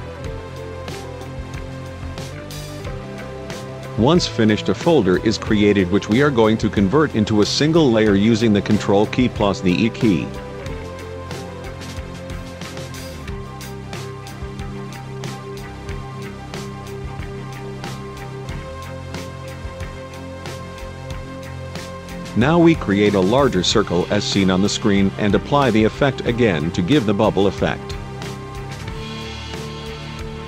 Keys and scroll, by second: 9.5 ctrl+e.